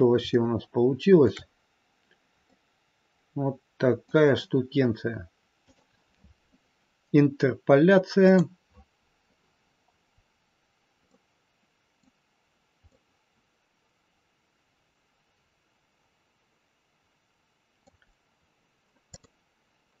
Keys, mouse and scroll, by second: 0.2 shift+middle click, 1.6 scroll down 2, 2.4 middle click, 9.1 click, 10.0 scroll up 2, 11.1 middle click, 12.5-12.9 scroll down 1, 12.9 middle click, 18.1-19.0 scroll down 2, 19.0 click.